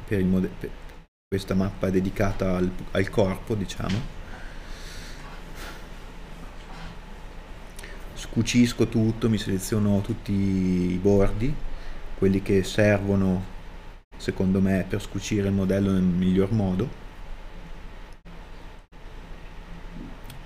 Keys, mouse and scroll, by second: 7.0 a, 7.2 alt+shift+right click, 8.5 ctrl+e, 11.2 middle click, 12.6 middle click, 13.8 a, 14.8 alt+shift+right click, 15.1 ctrl+e, 16.5 middle click, 17.8 a, 18.7 alt+shift+right click.